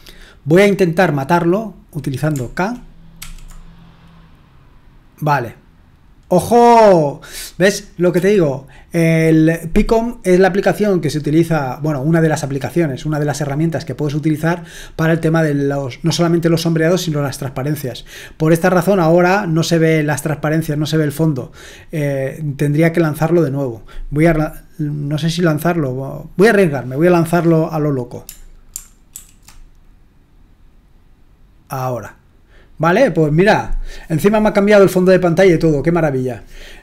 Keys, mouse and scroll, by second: 3.2 shift+k, 8.1 typing, 29.1 alt+super+r.